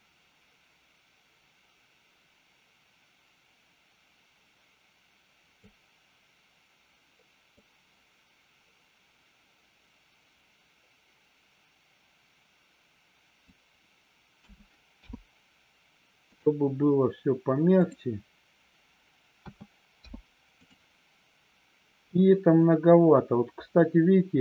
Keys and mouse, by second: 7.5-13.4 drag, 14.9 i, 19.9 i.